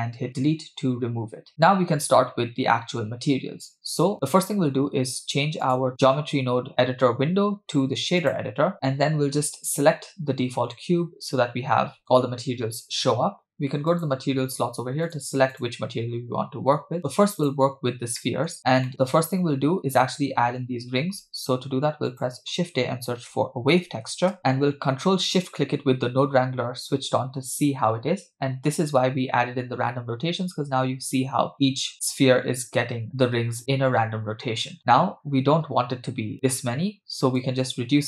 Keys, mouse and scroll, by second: 0.5 Delete, 5.6-8.3 drag, 13.9 click, 15.1 drag, 15.5 click, 17.4 click, 18.2 middle click, 18.9 scroll up 3, 18.9 middle click, 19.6-20.6 scroll up 1, 21.3 shift+a, 24.7 scroll up 1, 25.6 ctrl+shift+click, 34.5 scroll up 2, 34.8 middle click, 35.2-36.0 scroll up 2, 37.4-38.0 drag.